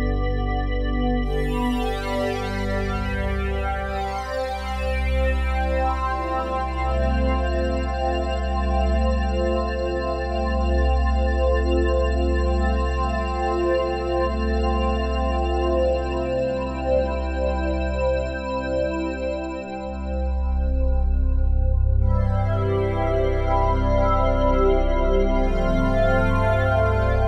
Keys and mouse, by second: 0.0 click, 2.0-4.6 drag, 7.5-8.8 drag, 12.4 click, 15.0-17.1 drag, 17.2-19.4 drag, 19.4-19.9 typing, 21.0 Return, 24.5 click, 25.9 click.